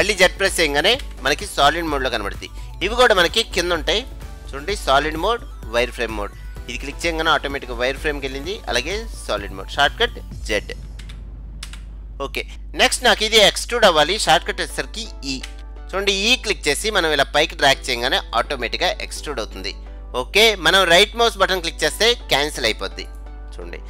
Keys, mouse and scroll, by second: 1.0 z, 4.1-5.9 drag, 8.5-10.3 drag, 11.1 z, 11.7 z, 12.5-13.2 scroll down 2, 13.2-14.7 middle drag, 14.7 scroll up 1, 14.9 middle click, 15.5 e.